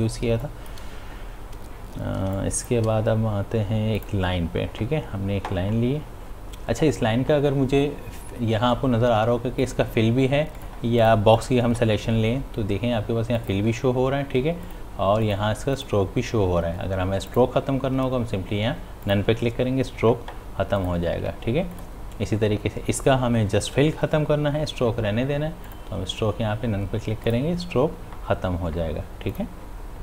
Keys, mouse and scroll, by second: 0.3 space, 0.4 click, 2.2 space, 2.5 click, 2.7 space, 4.0 click, 9.6 click, 25.7 click.